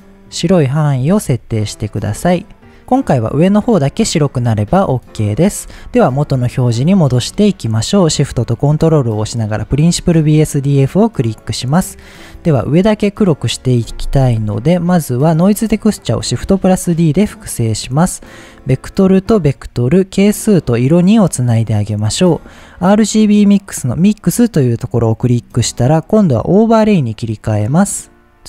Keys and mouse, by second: 1.4-2.4 middle drag, 2.9-3.7 middle drag, 4.7 shift+click, 6.4 middle click, 9.4 ctrl+shift+click, 11.6 click, 14.7 middle click, 15.5 click, 16.4 shift+d, 17.6 drag, 18.6-19.8 drag, 20.2-21.3 drag, 23.4-26.8 drag.